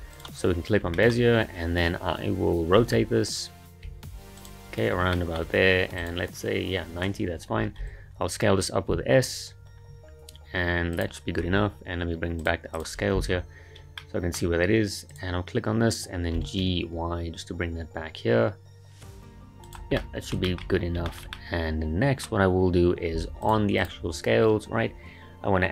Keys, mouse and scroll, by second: 0.9-1.3 shift+middle drag, 1.3-2.8 scroll up 2, 2.8 r, 5.1 shift+middle click, 6.0-7.8 drag, 7.8 s, 12.4 click, 12.7 click, 13.3-14.0 scroll down 5, 14.0-14.6 shift+middle drag, 14.6-15.1 scroll up 1, 15.1 click, 16.4 g, 20.0-20.7 middle drag, 20.7-21.1 scroll up 2, 21.1-23.4 shift+middle drag, 23.4 click, 23.8 click.